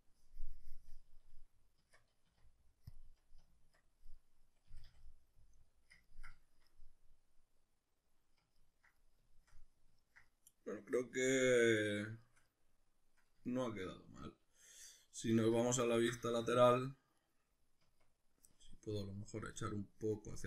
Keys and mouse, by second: 1.9 Tab, 2.3 q, 3.4 Tab, 4.2 middle click, 4.7 a, 5.0 middle click, 6.2-17.2 shift+middle drag, 15.4 alt+q, 17.2 right click, 17.8 Tab, 19.5-20.4 drag.